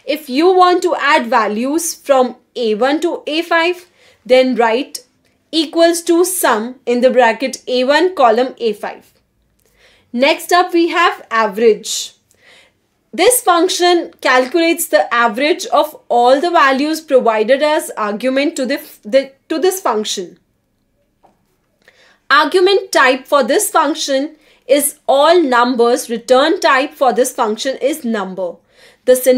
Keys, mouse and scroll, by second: 0.4-5.3 typing, 6.4 5, 7.0 shift+0, 9.2 BackSpace, 10.1 Return, 13.4 Escape, 21.6 click, 22.7 click, 24.6 click, 25.1-27.4 typing.